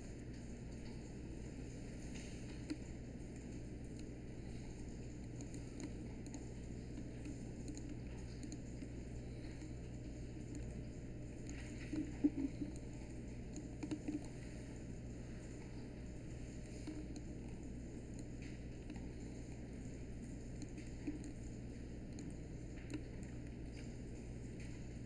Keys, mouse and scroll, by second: 7.2 3, 17.5 1.